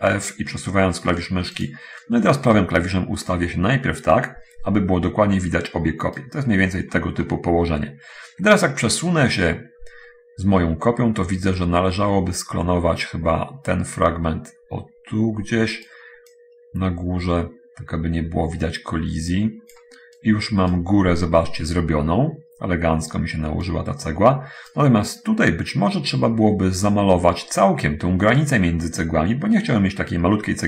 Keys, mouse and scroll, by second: 1.9 click, 2.7-6.6 right drag, 6.8-7.2 scroll up 2, 7.2-8.5 middle drag, 8.7-16.2 right drag, 16.2-20.1 drag, 20.5 right click, 23.7-25.1 right drag, 26.7-27.9 middle drag.